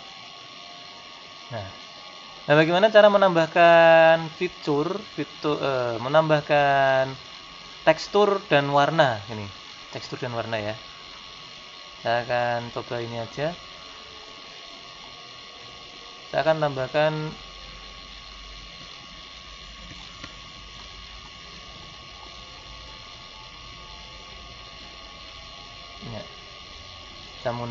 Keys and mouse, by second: 0.2 right click, 14.3 middle click.